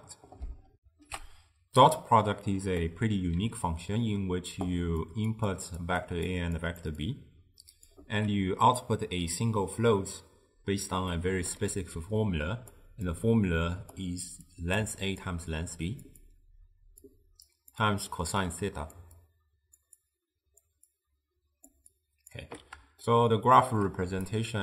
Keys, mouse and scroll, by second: 0.8 ctrl+alt+shift+w, 1.3 ctrl+alt+shift+q, 2.9-4.6 middle drag, 4.6-8.2 typing, 5.1 click, 5.6 click, 6.1 click, 6.7 click, 7.1-7.9 drag, 11.2 middle click, 12.0-22.6 typing, 12.3-12.8 drag, 13.2 click, 14.6 click, 15.0 click, 15.7-16.1 drag, 16.4-17.0 drag, 17.6 click, 18.0 click, 18.5 click, 19.3 click, 20.1 click, 21.0 click, 22.0 click, 23.1-24.1 shift+middle drag, 24.1-24.6 typing, 24.4-24.6 drag.